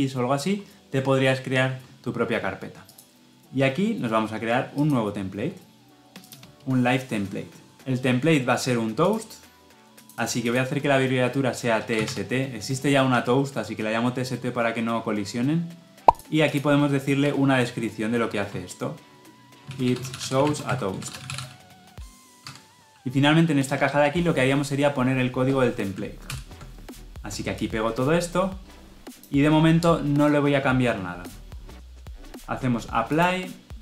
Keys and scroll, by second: 26.1 ctrl+v.